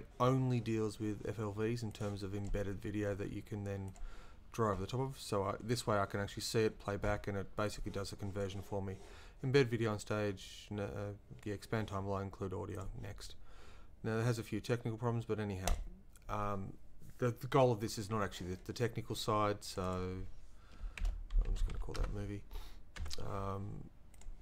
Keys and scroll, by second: 20.8-22.2 typing, 23.0 Caps_Lock.